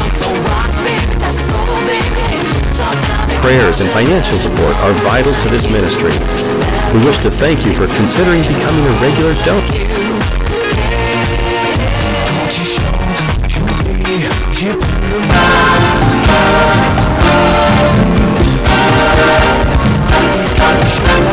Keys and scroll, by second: 10.4 Page_Down.